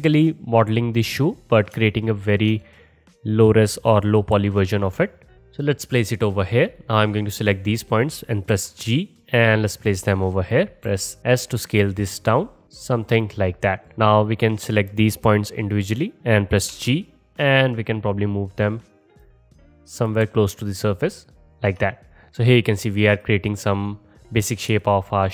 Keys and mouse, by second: 2.8-5.8 drag, 4.4 g, 5.8-6.8 middle drag, 6.8-10.5 drag, 8.6 g, 10.9 s, 16.7 g, 19.3 click, 20.3 g.